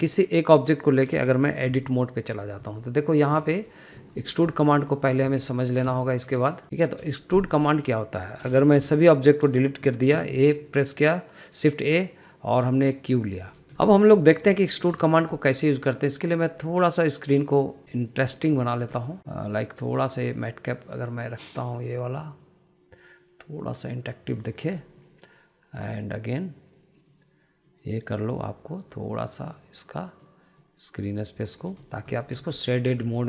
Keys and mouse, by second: 0.8 middle click, 1.5 click, 2.4 Delete, 3.0 click, 3.4 Delete, 4.0 Delete, 4.4 click, 4.7 Delete, 4.9 click, 5.2 Delete, 5.7 click, 6.0 Delete, 6.3 click, 6.6 Delete, 6.7 click, 6.9 Delete, 7.2-7.6 middle drag, 8.2 shift+middle drag, 9.1 click, 9.6 Delete, 10.1 middle click, 10.9 shift+a, 13.7 middle drag, 14.3 shift+middle click, 15.0 shift+middle click, 15.3 middle click, 15.8 shift+middle click, 16.1 shift+middle click, 17.2-18.5 drag, 18.7 shift+middle click, 19.1 middle click, 20.1-25.1 drag, 25.2 shift+middle click, 25.6 middle click, 26.5-32.3 drag, 32.6 middle click, 32.9 click.